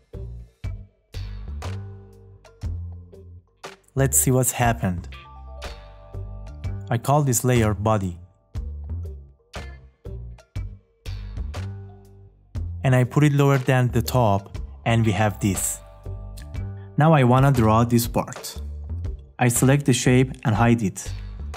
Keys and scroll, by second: 3.5 `.